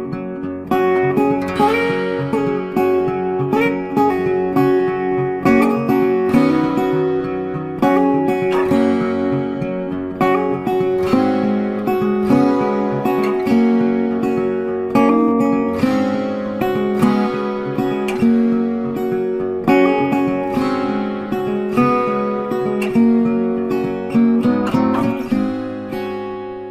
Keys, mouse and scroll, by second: 0.3 space, 0.4 double click, 0.6 ctrl+click, 3.3 shift+click, 4.1 ctrl+z, 4.7 shift+click, 6.2 space, 6.4 ctrl+click, 7.9 ctrl+space, 7.9 click, 9.6 ctrl+space, 9.6 ctrl+click, 12.0 alt+click, 13.2 alt+click, 14.8 space, 15.5 ctrl+space, 17.7 ctrl+space, 17.8 ctrl+click, 19.0 ctrl+space, 19.6 ctrl+click, 20.2 ctrl+click, 24.9 alt+click.